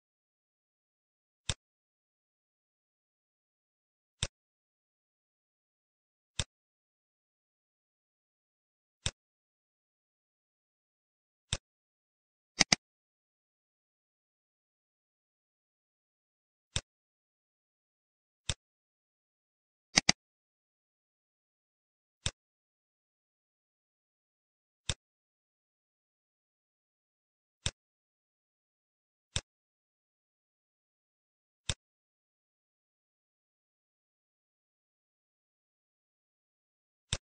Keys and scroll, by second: 7.7 ctrl+c, 23.0 ctrl+v.